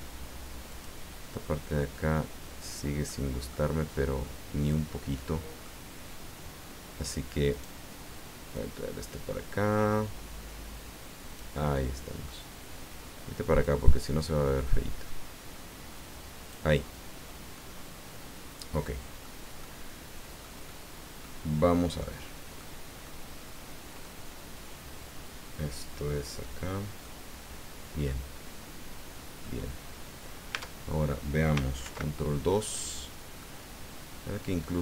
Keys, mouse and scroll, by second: 0.7-1.9 drag, 2.1 click, 3.1 click, 3.8-5.8 drag, 7.5 right click, 8.5-12.4 drag, 13.6-16.7 drag, 16.8 scroll down 1, 17.6-19.4 middle drag, 19.6-20.6 middle drag, 20.7 middle click, 21.5 scroll down 1, 22.0 click, 23.0-24.2 drag, 27.0-29.6 drag, 29.8-30.1 scroll up 1, 30.5 Tab, 31.8 ctrl+2, 32.6-34.8 drag.